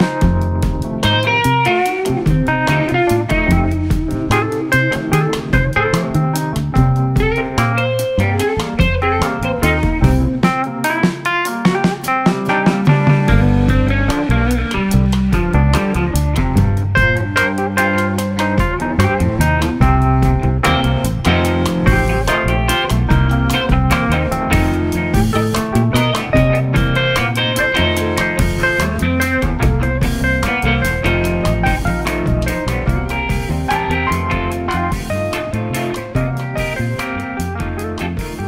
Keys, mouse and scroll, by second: 0.2 s, 4.0-5.4 middle drag, 5.4 g, 11.1-11.7 middle drag, 11.7 Tab, 12.2-13.2 middle drag, 13.2 click, 14.5 3, 14.6 click, 16.0 KP_7, 18.1 e, 20.4-21.6 middle drag, 21.6 click, 22.5 KP_1, 23.4 e, 27.3 ctrl+right click, 29.1 ctrl+right click, 30.1 click, 30.8-31.7 middle drag, 31.7 right click, 32.5-32.9 middle drag, 32.9 click, 33.4 click, 34.3 g, 35.8-36.1 scroll down 1, 36.1 click, 36.4-37.4 middle drag, 37.4-38.2 drag.